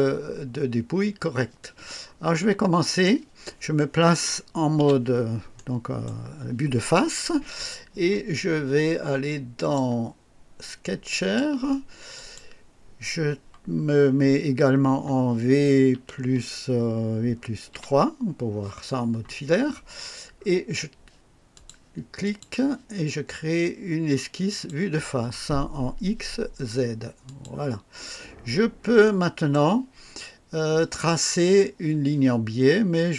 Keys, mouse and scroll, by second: 1.6-3.2 drag, 4.8 KP_1, 5.6-6.2 right drag, 9.6 click, 11.1 click, 12.1 click, 15.9 v, 17.7 KP_3, 21.5 click, 22.2 click, 24.5 click, 27.3 click, 28.4 scroll up 1, 29.0-29.7 right drag.